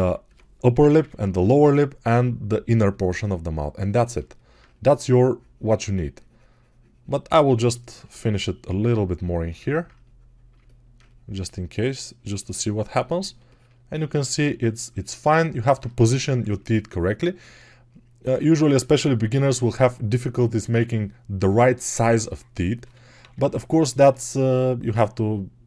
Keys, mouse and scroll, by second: 0.1 1, 0.6 [, 0.7 [, 0.8 [, 17.3 alt+q, 22.7 g, 23.0 ], 23.2 ].